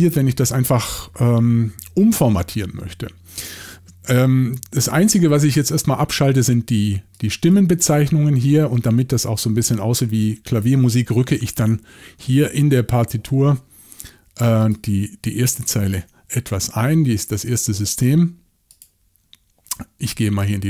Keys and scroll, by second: 10.7 typing, 12.3 typing, 16.0 shift+super+l.